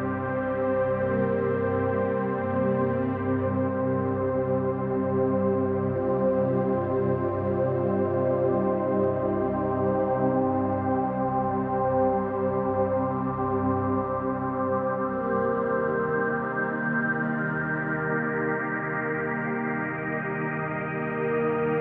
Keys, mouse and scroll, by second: 0.2 click, 0.9 click, 1.8 click, 4.2 click, 5.3 click, 6.4 click, 8.8 click, 9.9 click, 10.1 click, 11.0 click, 13.5 click, 14.4 click, 17.6 click, 18.6 click, 19.8 click, 20.5 click.